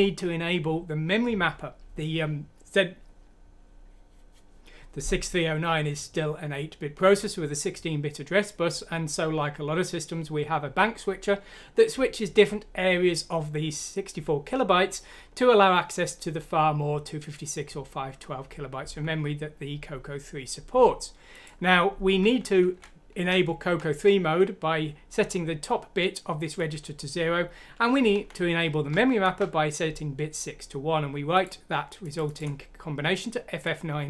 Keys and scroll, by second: 22.7 Left, 23.6 Left, 28.1 Right, 29.0 Right.